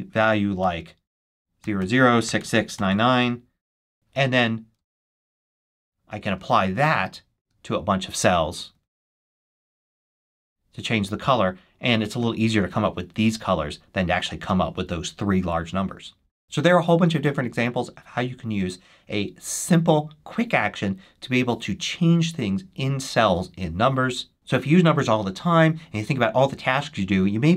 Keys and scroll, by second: 0.5 shift+', 1.5 shift+0, 2.7-3.6 typing, 4.7 super+s, 8.9 shift+super+1.